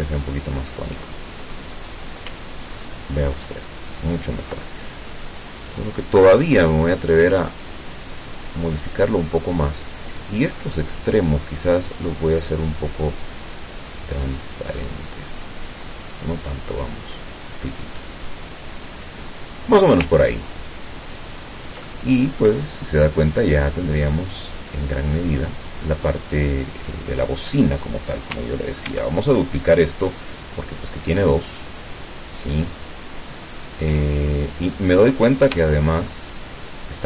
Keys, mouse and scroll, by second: 1.9 click, 2.6-3.5 ctrl+scroll down 4, 3.7-4.3 ctrl+scroll up 2, 5.0 ctrl+click, 8.1 click, 12.1-20.0 drag, 20.3-20.7 ctrl+scroll down 2, 21.4 ctrl+scroll down 2, 21.9 ctrl+middle click, 23.3 click, 23.9 click, 24.4 click, 26.9 scroll down 2, 28.9 ctrl+d, 29.5-34.2 ctrl+drag, 35.8-37.0 shift+drag.